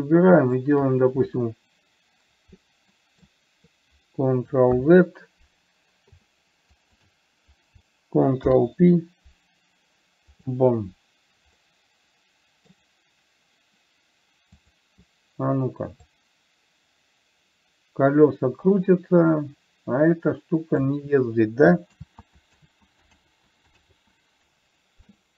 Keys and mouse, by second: 0.8 shift+click, 3.3 middle click, 5.1 ctrl+z, 7.1 shift+click, 8.7 ctrl+p, 12.0-13.1 middle drag, 15.0 click, 16.5-21.2 drag, 22.3 ctrl+z, 23.6 ctrl+z.